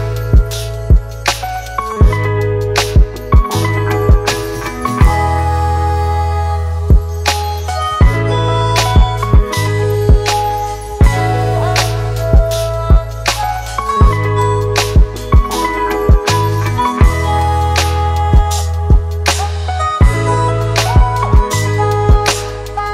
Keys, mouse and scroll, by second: 2.1-2.5 typing, 3.7 double click, 11.9 ctrl+t, 17.5 Return.